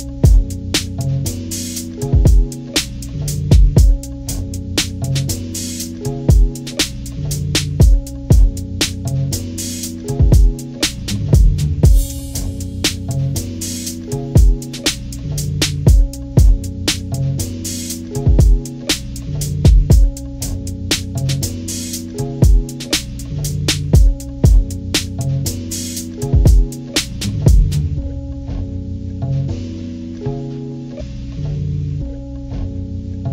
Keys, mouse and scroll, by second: 10.1 ctrl+-, 10.7 click, 11.0 click, 11.7 ctrl+=, 12.0 scroll up 2, 13.2 click, 14.1 ctrl+-, 14.3 ctrl+=, 14.6 click, 14.7 click, 15.4-16.6 drag, 16.7 click, 17.8 ctrl+-, 18.4 click, 18.6 ctrl+=, 18.7 click, 18.9 scroll down 2, 19.7 click, 20.4 ctrl+-, 20.8 click, 21.0 ctrl+=, 21.1 scroll down 2, 21.6 click, 21.7 click, 22.0 click, 23.0 ctrl+-, 23.4-25.0 drag, 25.0 ctrl+-, 25.1 click, 25.3 ctrl+=, 25.7 click, 26.1 click, 26.3 ctrl+=, 26.7 scroll up 2, 27.1-29.6 drag, 30.1 click, 30.3-31.0 ctrl+scroll down 3, 30.5 ctrl+=, 31.0-32.3 drag, 32.4 scroll down 1, 32.6 click.